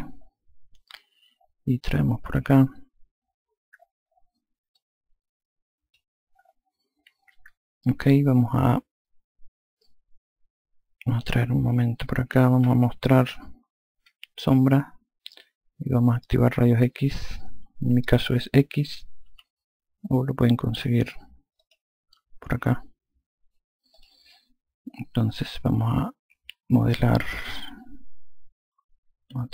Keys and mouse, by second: 1.8 click, 4.7 click, 11.2 click, 14.0 n, 19.2 x, 21.5 click, 23.9 click.